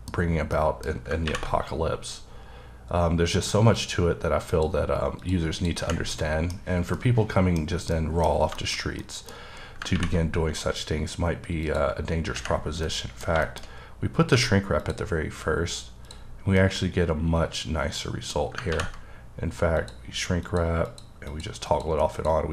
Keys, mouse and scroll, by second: 0.3-0.6 scroll up 1, 0.6 middle click, 3.8 click, 4.5 click, 5.6 click, 6.2 middle click, 6.6 scroll down 2, 7.0 middle click, 7.7 scroll up 1, 7.9 middle click, 8.8 scroll up 1, 9.0 middle click, 9.4-10.0 scroll up 2, 11.7 click, 12.6 scroll down 1, 12.9 middle click, 13.7 scroll up 1, 14.4 q, 14.8 click, 16.4 scroll down 1, 16.6 middle click, 19.8 click, 20.5 click, 20.9 click, 21.3 click, 21.7 click, 22.2 click.